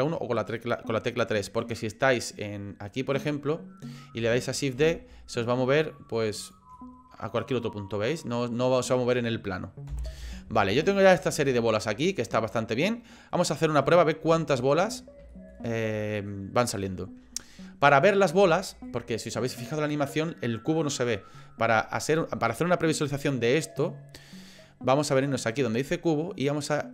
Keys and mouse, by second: 2.9 middle click, 4.8 shift+d, 6.9-8.7 middle drag, 9.9 Delete, 10.7-13.8 middle drag, 14.3 shift+middle click, 15.3 shift+middle click, 15.7 middle click, 18.6 shift+middle click.